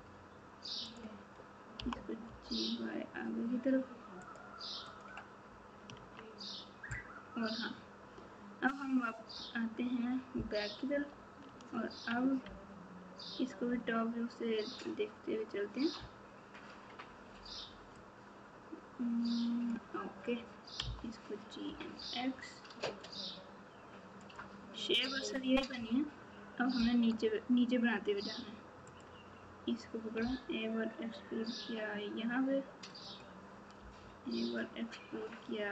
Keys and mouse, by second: 0.9 click, 1.7 g, 4.9 click, 5.9 KP_3, 10.9 KP_7, 12.4 ctrl+KP_8, 18.1 click, 20.8 g, 25.7 KP_3, 28.8 click, 33.0 e, 33.8 e.